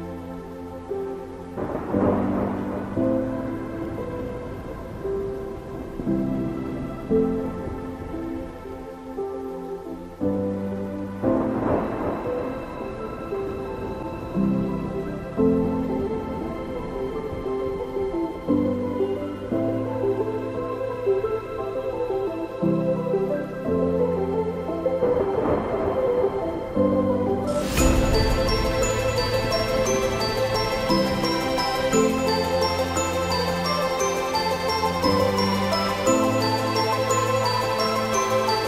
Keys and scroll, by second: 13.3 ctrl+j.